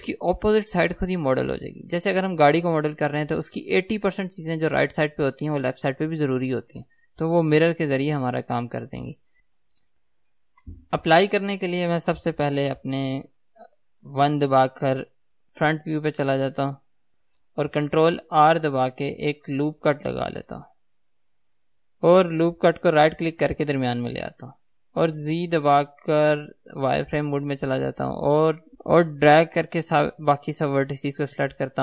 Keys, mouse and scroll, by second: 16.3 KP_1, 17.2 right click, 18.9 ctrl+r, 25.8 right click, 27.2 z, 28.8 ctrl+z, 29.4 click.